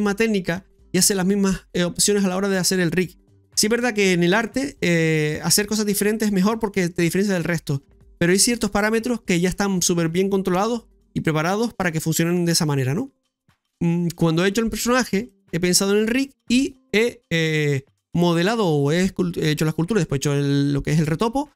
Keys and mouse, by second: 13.4 Tab, 15.2 middle click, 19.4 middle click.